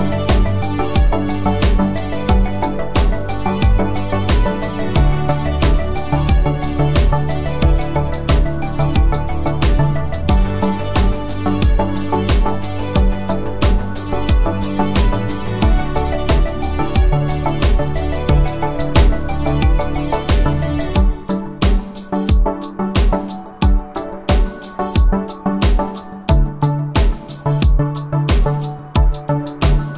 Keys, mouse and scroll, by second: 3.7 space, 5.0 click, 20.2 ctrl+c, 22.4 ctrl+v, 23.5 space.